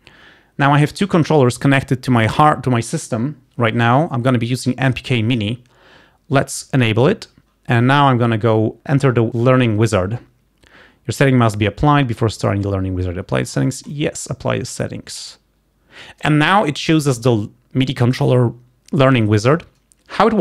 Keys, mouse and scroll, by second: 7.0 click, 9.4 click, 14.1 click.